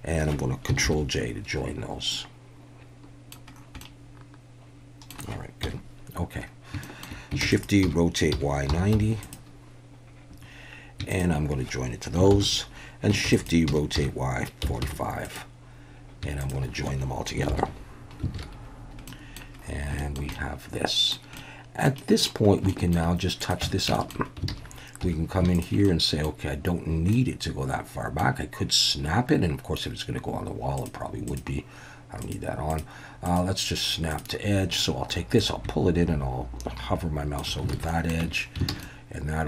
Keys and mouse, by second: 0.9 ctrl+j, 2.1-3.3 middle drag, 3.8-5.1 middle drag, 5.6 KP_1, 6.8 shift+click, 7.5-8.9 typing, 7.5 click, 9.2 click, 11.1 shift+click, 12.4 ctrl+j, 13.3-14.8 typing, 15.3 click, 16.4 shift+drag, 17.6 ctrl+j, 18.3 alt+a, 19.1 middle drag, 20.0 shift+middle drag, 20.3-21.1 middle drag, 21.4-21.9 middle drag, 22.0 middle click, 22.7 shift+middle drag, 23.4 click, 23.6 Tab, 23.9 shift+middle click, 24.5 alt+a, 25.0 2, 25.9-26.2 middle drag, 27.2-28.2 middle drag, 30.8 click, 31.3-32.3 drag, 32.7 drag, 33.4-34.4 drag, 35.4-37.4 drag, 37.7 alt+a, 37.9 middle click, 38.2 Tab, 38.7 alt+a, 38.8-39.4 middle drag.